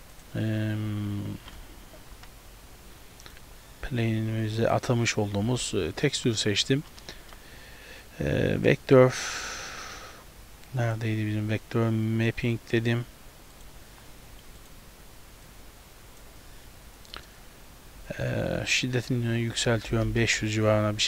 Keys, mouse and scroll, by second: 0.2 click, 4.1 click, 6.1 middle click, 6.7-7.1 scroll down 4, 7.3 shift+a, 15.5 click, 16.7-17.7 scroll up 5, 17.2 middle click, 19.0 click, 20.1 KP_0.